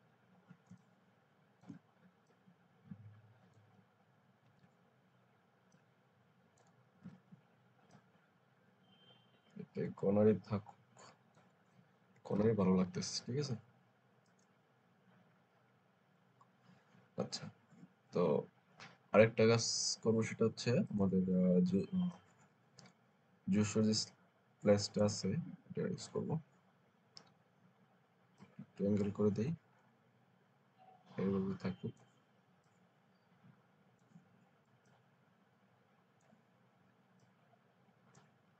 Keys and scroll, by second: 0.6 alt+space, 4.3 ctrl+t, 7.0 Return, 12.2 ctrl+0.